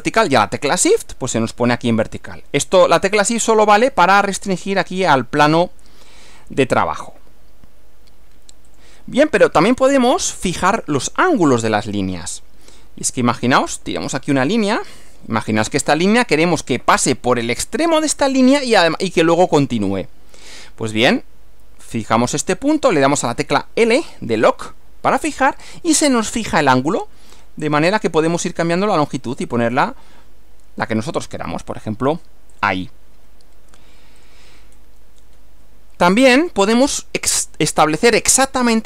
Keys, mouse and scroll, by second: 8.8 shift+click, 13.8 click, 15.4 click, 23.9 l, 32.6 click, 34.2 click, 34.8 scroll down 1, 36.4 click.